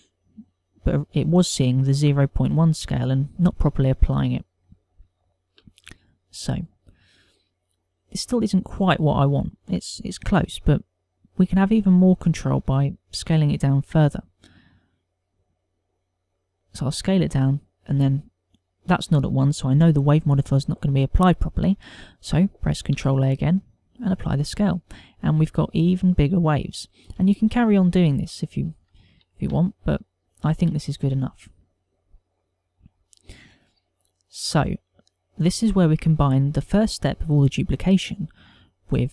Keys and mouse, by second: 5.5 ctrl+middle click, 6.2 shift+middle click, 6.7 middle click, 14.1 s, 17.8 click, 23.7 ctrl+a, 27.0 middle click, 30.1 shift+middle click, 30.5 ctrl+middle click, 31.1 shift+middle click, 33.6 click.